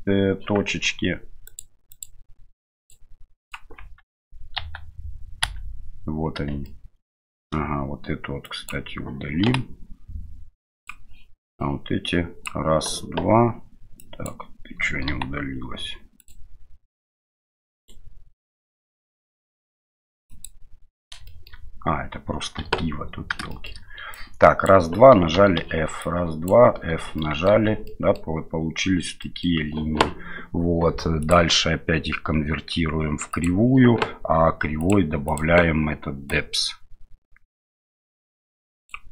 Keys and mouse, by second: 1.4 click, 2.0 click, 2.8 click, 3.4 click, 3.8 Tab, 4.6 1, 5.4 a, 6.6 shift+middle click, 8.4 click, 9.4 Delete, 11.5 click, 14.1 click, 15.1 Delete, 17.7 right click, 18.7 middle click, 20.3 click, 21.2 shift+middle click, 22.6 KP_7, 23.5 middle click, 24.2 click, 25.3 f, 26.1 click, 26.7 f, 27.1 middle click, 27.5 Tab, 27.8 middle click, 29.2 middle click, 31.2-33.5 drag, 34.8 click, 35.3 click, 36.3-39.0 drag.